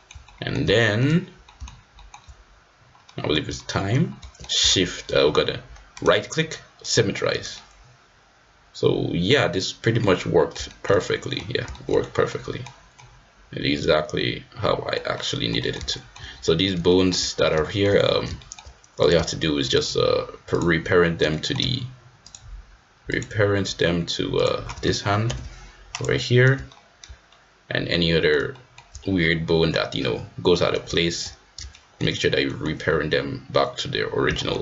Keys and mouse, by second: 0.2 middle click, 0.7 shift+middle click, 1.4 shift+middle click, 1.9 shift+middle click, 3.0 middle click, 3.5 shift+middle click, 4.2 shift+middle click, 7.5-10.0 middle drag, 10.1 middle click, 10.6 shift+middle click, 10.9 middle click, 11.7 shift+middle click, 12.2 middle click, 12.9 middle click, 13.3 click, 13.5-14.9 middle drag, 15.1 middle click, 15.7 middle click, 15.9 shift+middle click, 16.8 shift+middle click, 17.6 shift+click, 18.4 shift+middle click, 19.7 shift+click, 20.5 shift+click, 21.2 middle click, 22.2 shift+click, 23.2 shift+click, 25.2 ctrl+p, 26.6 shift+click, 27.2 middle click, 27.9 click, 28.5 shift+click, 31.7 shift+middle click, 32.5 middle click, 34.3 shift+middle click.